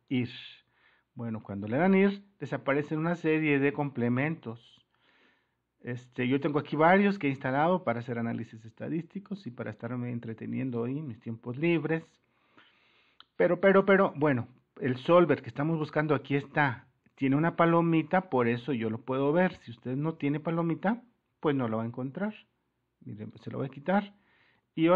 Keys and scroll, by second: 24.8 super+-.